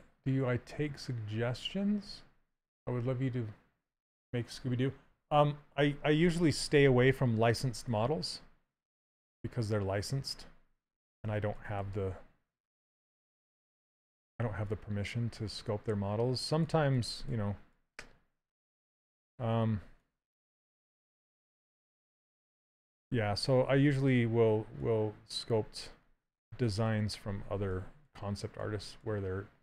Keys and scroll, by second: 23.5 s, 27.3 s.